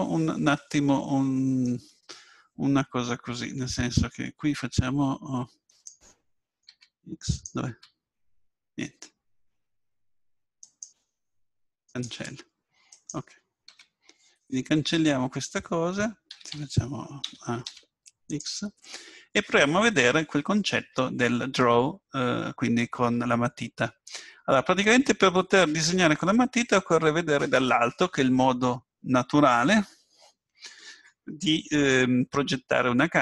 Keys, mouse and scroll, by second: 8.6-10.3 right drag, 8.6 x, 12.9-14.6 right drag, 13.7 x, 16.3 a, 16.5 a, 17.3 a, 17.6 x, 24.2 KP_7.